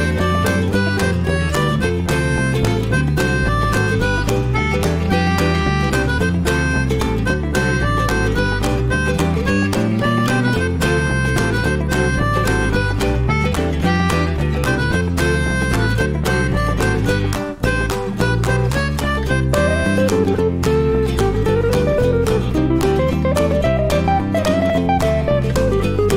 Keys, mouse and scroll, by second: 0.1 scroll up 1, 0.3-1.1 middle drag, 1.1 scroll up 1, 1.3-4.0 middle drag, 4.0 drag, 4.2 shift+middle click, 4.4 scroll down 1, 4.5 middle click, 5.3 scroll up 1, 5.4-8.3 shift+middle drag, 8.3 click, 8.9 click, 10.1 click, 11.7-12.1 middle drag, 12.1 click, 12.8 click, 13.7 click, 14.1 click, 14.9-15.5 scroll down 1, 15.6 click, 15.8-16.6 scroll down 2, 16.6 click, 17.3 scroll down 1, 18.3-19.4 drag, 19.6-20.2 middle drag, 20.2 click, 21.3 click, 22.4-26.1 shift+middle drag.